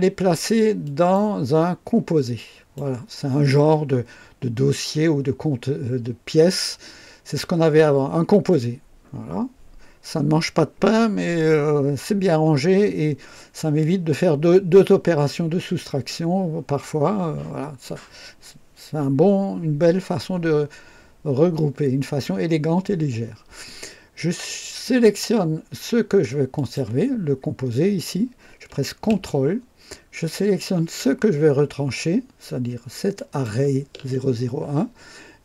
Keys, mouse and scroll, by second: 0.8 click, 2.3 click, 26.5 click, 33.1 ctrl+click.